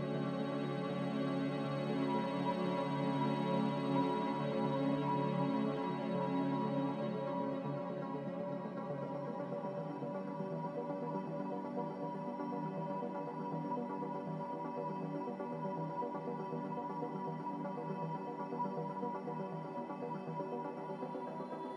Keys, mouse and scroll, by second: 1.4 q, 1.5 q, 4.3 1, 5.0 0.